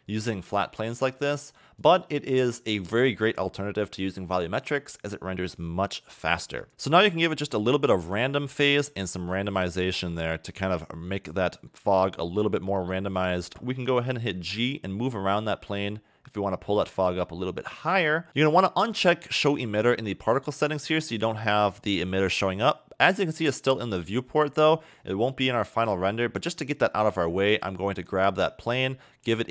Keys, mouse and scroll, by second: 1.0 a, 1.2 a, 1.8 click, 2.4 click, 5.8 scroll up 2, 6.6 click, 6.9 click, 9.3 click, 11.7 middle click, 13.5 KP_0, 14.2 g, 17.8 a, 18.0 a, 18.3 click, 20.4 click, 25.7 click, 27.2 click, 28.0 click.